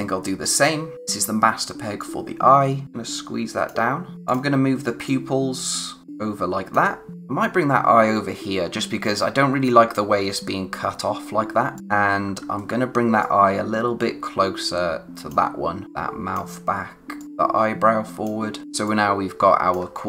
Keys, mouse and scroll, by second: 1.9 click, 4.1 scroll up 1, 4.2 click, 11.7 click, 11.9-12.5 typing, 13.2 click, 18.6 space, 18.8 click, 19.1 space.